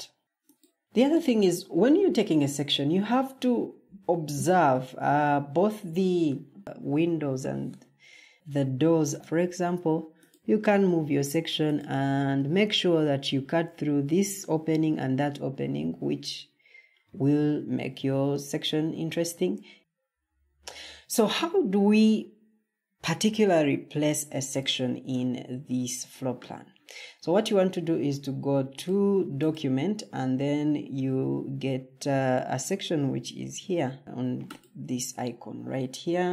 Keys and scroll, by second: 9.1 ctrl+d, 19.8 Escape.